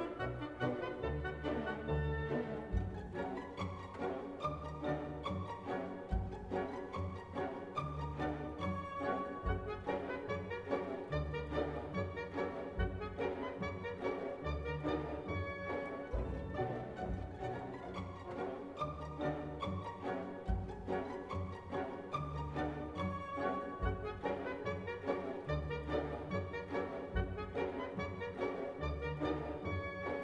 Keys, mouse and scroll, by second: 0.8 click, 1.6 click, 3.8-5.8 drag, 6.8 click, 26.6-30.2 drag.